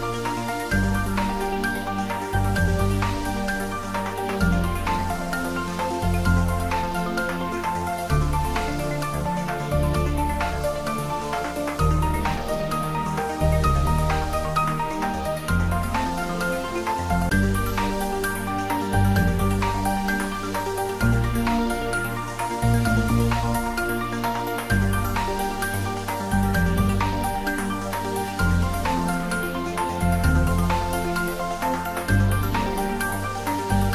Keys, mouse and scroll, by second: 1.7 alt+shift+click, 5.0-6.3 scroll down 2, 6.3-6.9 scroll down 1, 8.0-8.7 scroll up 1, 13.4 click, 16.6 click, 19.0 click, 26.4 click, 26.6 ctrl+z, 30.0-30.6 scroll up 1, 32.6-33.9 middle drag.